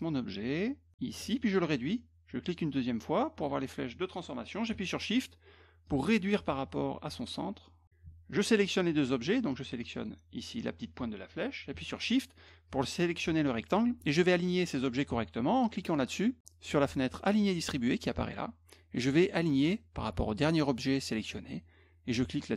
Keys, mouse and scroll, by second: 2.4 click, 5.9-7.8 shift+drag, 8.3 shift+click, 9.3 click, 9.9 click, 12.4 shift+click, 17.4 click, 20.7 click, 21.2 click.